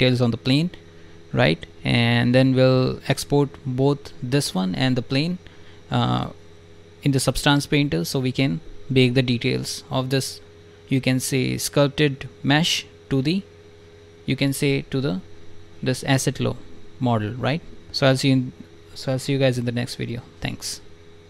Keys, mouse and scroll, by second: 1.7 alt+right click, 16.7 alt+click, 17.1 click, 17.7 alt+click, 18.0 click.